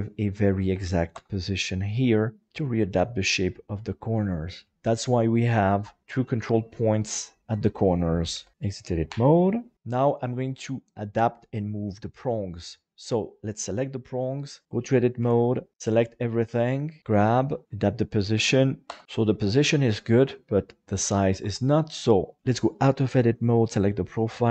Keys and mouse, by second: 2.5 middle click, 4.1 middle click, 6.2 right click, 6.6 right click, 8.3 KP_7, 9.4 Tab, 9.4 middle click, 9.7 alt+a, 11.6 right click, 14.6 Tab, 15.2 KP_7, 15.7 a, 16.0 shift+middle click, 17.0 g, 18.0 click, 19.0 middle click, 21.4 Tab, 23.3 right click.